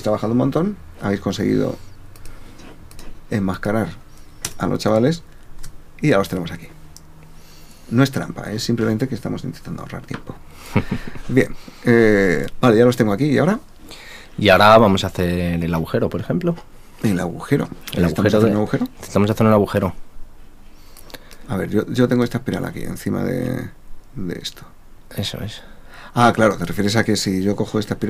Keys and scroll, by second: 5.4 super+v.